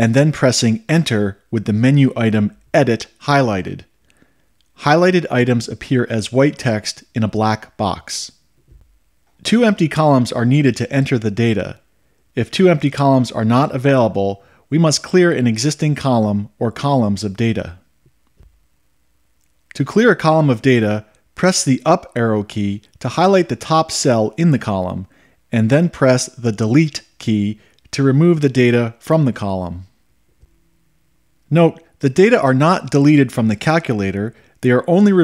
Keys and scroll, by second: 8.0 Return, 22.4 Up, 27.7 Delete.